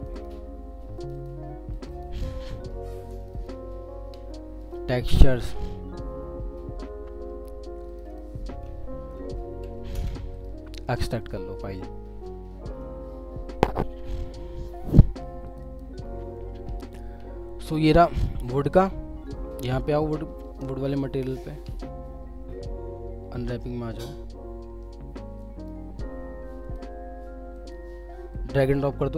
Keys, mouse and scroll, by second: 8.0 double click, 10.0 ctrl+v, 10.3 right click, 15.6 double click.